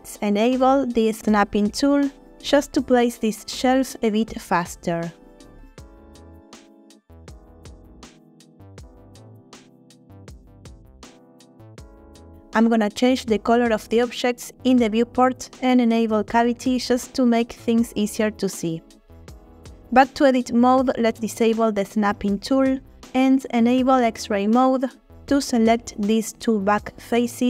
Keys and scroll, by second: 7.1 g, 7.3 z, 9.6 g, 10.0 y, 20.2 Tab.